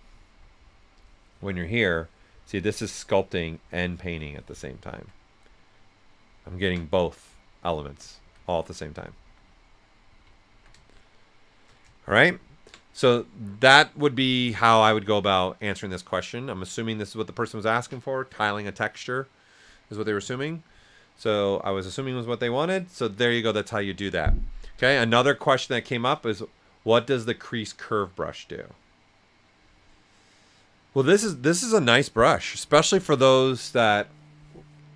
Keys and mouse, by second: 0.9-4.6 drag, 4.6 alt+right click, 5.2 right click, 8.6 right click, 9.0 alt+right click, 9.5 ctrl+right click, 10.5 s, 10.6-12.1 drag, 12.1 right click.